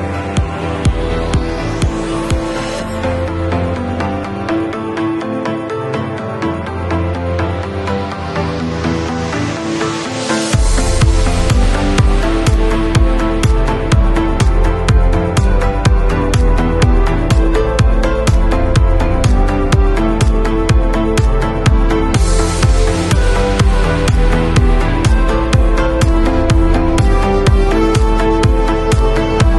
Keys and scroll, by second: 14.6 b, 17.8 0, 23.4 [, 25.6 ], 28.0 v.